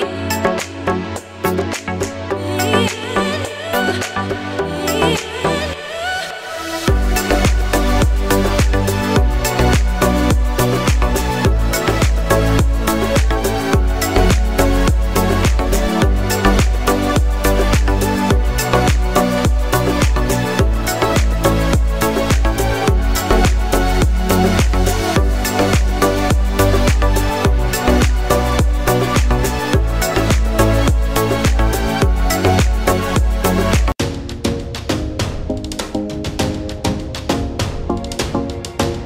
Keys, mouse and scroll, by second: 0.9 click, 2.3 click, 2.6 scroll down 1, 3.4 click, 5.9 scroll up 1, 6.7 click, 15.3 scroll down 1, 17.3 click, 18.6 scroll up 1, 19.6 click, 22.6 right click, 23.7 click, 28.0 scroll down 1, 28.9 click, 29.2 scroll down 1, 29.9 click, 34.0 click, 36.7 click, 38.2 scroll down 1.